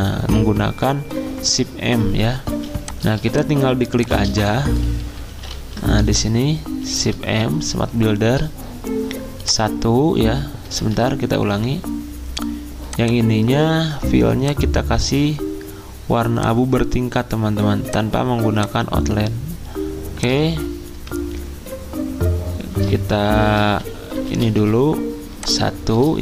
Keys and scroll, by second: 2.5 z, 10.6 typing, 10.7 ctrl+z, 20.9 /, 23.7-24.5 typing.